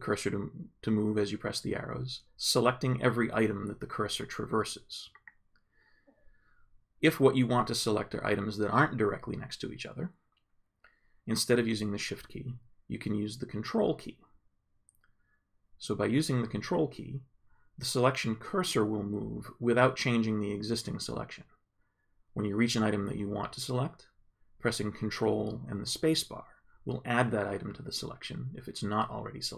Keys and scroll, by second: 0.5 shift+Right, 2.6 shift+Right, 5.5 shift+Down, 18.9 ctrl+Up, 20.1 ctrl+Left.